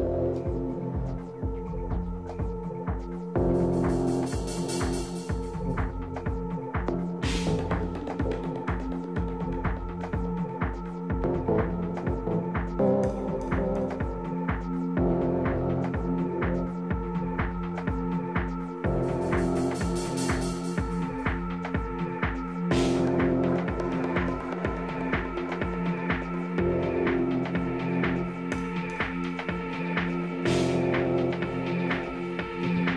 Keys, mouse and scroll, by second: 0.3 z, 1.1-2.7 middle drag, 6.3 middle click, 6.7 Tab, 7.9 a, 9.1-11.0 right drag, 9.9 a, 12.5-14.4 drag, 13.7 right click, 14.5-16.4 middle drag, 17.6-19.4 drag, 20.2-22.4 middle drag, 22.5 a, 23.3-25.3 right drag, 24.6-26.4 drag, 26.6-28.2 right drag, 27.6 click, 28.7 click, 29.4-31.3 middle drag, 31.6 a, 32.0 middle click.